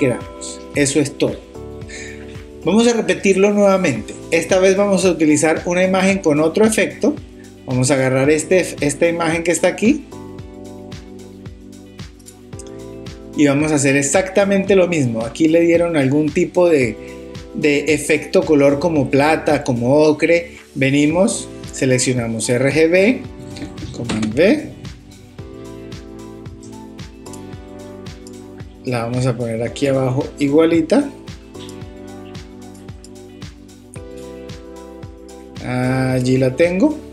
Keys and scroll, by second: 24.1 super+v.